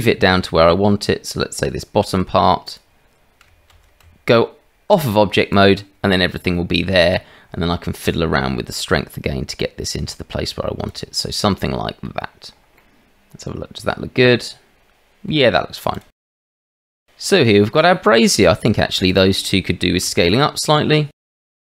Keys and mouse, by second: 3.7 shift+z, 4.0 Tab, 6.2-6.8 middle drag, 8.7-10.9 middle drag, 11.5-12.0 middle drag, 12.7-15.3 middle drag, 16.2 middle drag, 17.9-18.2 shift+middle drag, 18.6 click, 19.0 shift+click, 20.0 s, 21.4 g.